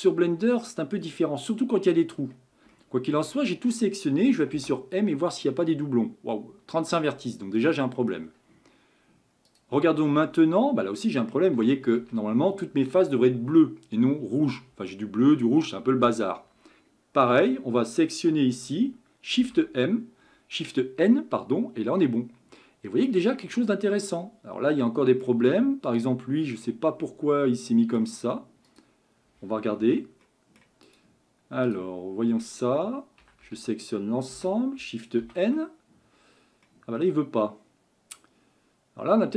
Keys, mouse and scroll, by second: 0.8 scroll up 1, 1.0 scroll down 3, 2.1-2.7 scroll down 3, 2.7-4.5 shift+middle drag, 4.5 m, 7.0-9.5 middle drag, 9.5 click, 10.3-11.6 middle drag, 11.6 a, 12.0 a, 19.5 shift+n, 21.2 scroll down 1, 21.4-23.4 middle drag, 23.4-23.9 scroll up 4, 23.9-25.9 middle drag, 25.9 click, 26.6-28.1 middle drag, 28.1-28.4 scroll up 1, 28.7 click, 29.8 Tab, 30.3 middle click, 30.9 click, 31.7 click, 32.3 Tab, 33.2 a, 33.5 a, 34.4 a, 35.2 shift+n, 36.7-39.3 middle drag.